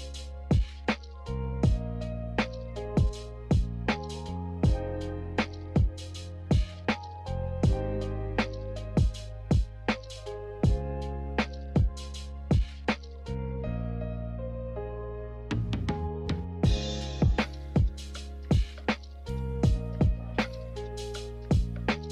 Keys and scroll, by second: 6.5 x, 9.1 g, 12.1 z, 14.8 Delete, 15.5 z, 18.8 v.